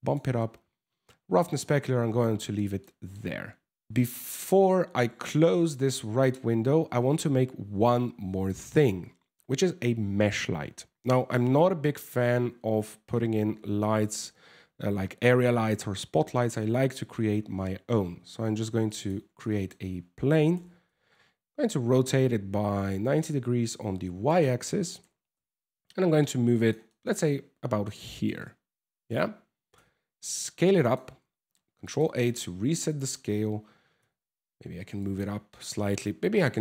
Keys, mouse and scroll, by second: 1.9 scroll down 3, 2.4 shift+middle click, 3.9 scroll up 1, 4.1 ctrl+s, 11.3 shift+a, 16.1 scroll down 1, 16.6 shift+a, 19.0 middle click, 20.1 r, 24.6 g, 26.5 middle click, 27.6 shift+middle click, 28.0 middle click, 29.3 s, 30.8 ctrl+a, 31.8 middle click, 33.6 g, 35.6 s.